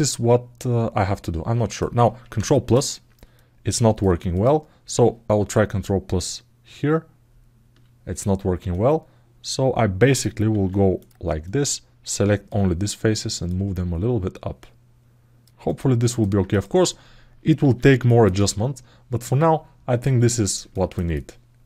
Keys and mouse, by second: 0.0-1.5 alt+middle drag, 2.1 ctrl+KP_1, 3.1 middle click, 4.1 click, 5.3 ctrl+KP_1, 7.1 ctrl+KP_1, 8.5-10.0 alt+middle drag, 10.8 click, 11.2-12.2 drag, 13.3-15.2 drag, 15.4 alt+middle click, 16.2 click, 17.9 ctrl+alt+middle click, 18.1 alt+middle click, 19.2 alt+middle click, 19.8 alt+middle click, 20.5 ctrl+alt+middle click, 20.9 alt+middle click.